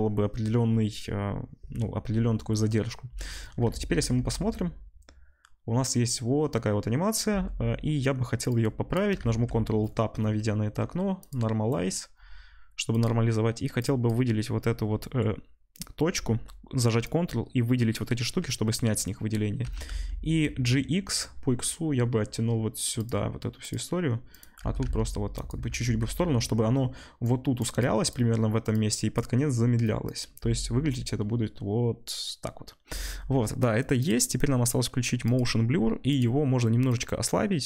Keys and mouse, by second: 3.8 ctrl+s, 4.4 space, 7.3 space, 9.2 ctrl+Tab, 9.2-11.3 ctrl+drag, 11.3-12.9 middle drag, 12.9 click, 13.0-13.7 middle drag, 13.7-23.0 drag, 19.6 g, 23.0 middle click, 23.6 click, 23.7 middle click, 24.3 click, 24.4-27.2 middle drag, 24.6 g, 25.9 ctrl+s, 27.2-34.1 drag, 30.3 space, 34.1-35.2 middle drag, 35.2 drag, 35.4 middle click, 36.0-37.6 drag.